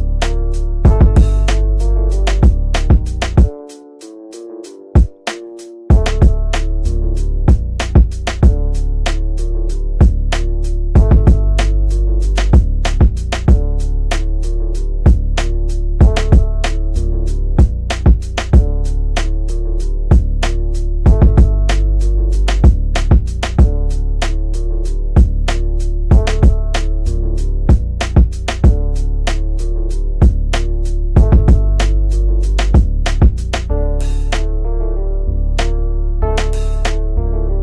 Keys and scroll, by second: 1.5 F3, 17.5 shift+F2, 18.2 Escape, 37.4 ctrl+g.